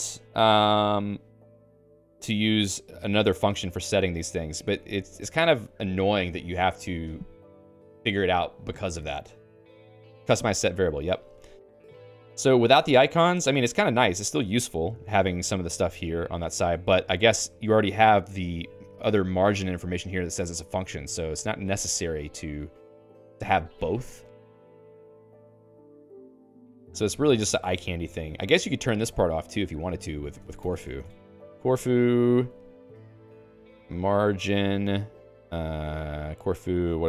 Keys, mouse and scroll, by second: 3.4 Down, 30.2 ctrl+g, 31.2-36.0 typing.